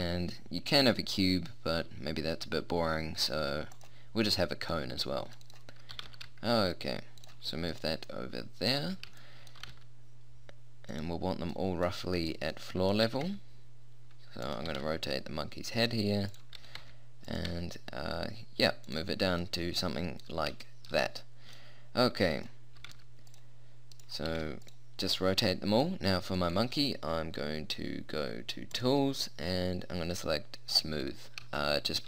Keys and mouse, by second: 4.7-5.9 drag, 5.9 g, 7.1 click, 8.1 click, 9.7 g, 13.1 r, 14.7 g, 17.5 g, 19.2 click, 19.6 click, 20.3 click, 21.3 middle click, 22.8 r, 23.9 click, 24.3 r, 27.5 right click, 28.7-30.5 drag, 30.5 right click, 30.7-31.9 drag, 31.9 middle click.